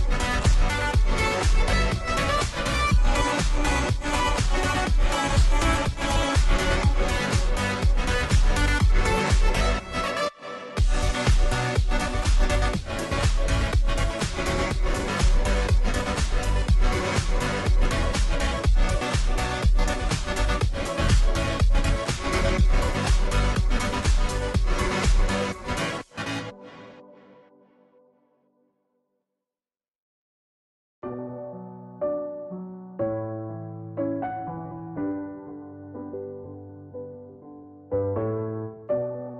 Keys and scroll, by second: 4.9 space, 5.1 space, 5.2 space, 5.3 space, 6.5 ctrl+t, 7.6 Return, 11.4-13.6 typing, 17.3-18.0 typing, 21.3 ctrl+t, 27.8 Return, 28.2-28.9 Down, 29.3 Down, 31.6 Left, 32.2 Down, 32.5 Down, 35.7 Down, 36.1 Down, 37.9 Left, 37.9 Up, 38.2 Down, 39.2 Down.